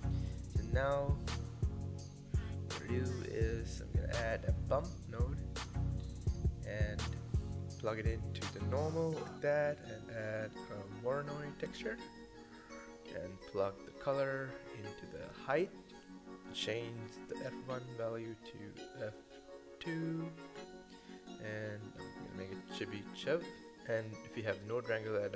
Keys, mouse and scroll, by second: 0.4 click, 5.5-7.7 scroll up 1, 7.7-8.9 drag, 8.9 middle click, 10.1 shift+a, 14.2 scroll up 3, 15.6 click, 17.0-19.5 middle drag, 19.5-23.2 drag, 24.0 click.